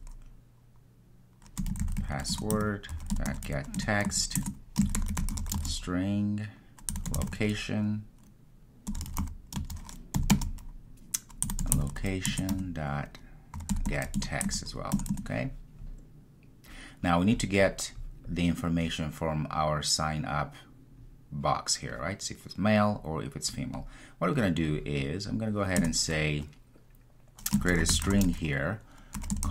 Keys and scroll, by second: 2.5 Return, 12.4 Return.